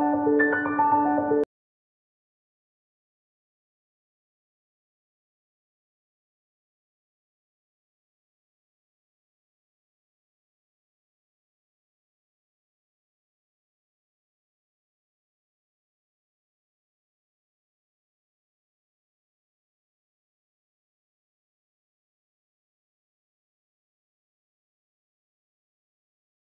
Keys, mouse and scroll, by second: 2.3 click, 3.1-3.8 scroll down 1, 3.8-4.5 scroll up 2, 4.0 click, 4.5 scroll down 1, 4.9-5.3 scroll up 1, 5.9 scroll down 1, 7.9 scroll up 1, 10.5 click, 11.1-11.4 scroll down 1, 12.3 click, 13.9-14.2 scroll up 1, 14.4 scroll down 1, 14.7 click, 19.3 click, 22.2 click, 23.9 ctrl+j, 24.1 click, 24.2-24.6 scroll down 1, 24.7 scroll up 1, 24.9 right click, 25.2 scroll down 1, 25.8 scroll up 1.